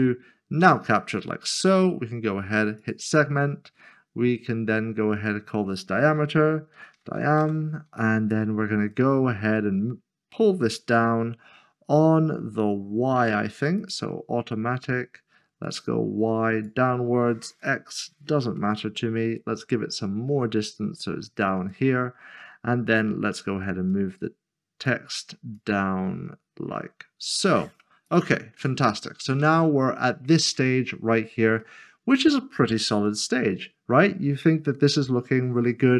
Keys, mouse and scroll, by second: 0.6-1.2 typing, 0.7 scroll up 1, 2.8 click, 4.4-5.2 scroll down 1, 5.2 click, 6.7-7.2 typing, 7.4 Return, 8.8 click, 9.2 scroll down 1, 13.8 click, 18.6 Return, 19.9 click, 23.9 click, 28.1 click, 28.6 Tab, 29.1-29.4 scroll, 29.6 shift+middle click, 31.6 shift+middle click, 33.1 shift+middle click.